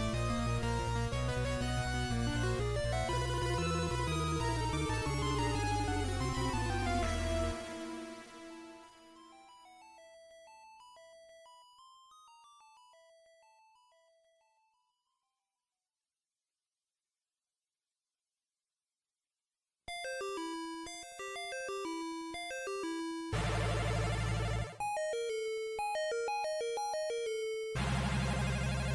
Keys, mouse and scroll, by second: 1.4-2.6 scroll up 1, 4.0-5.0 scroll up 2, 4.0 q, 18.4 scroll up 1.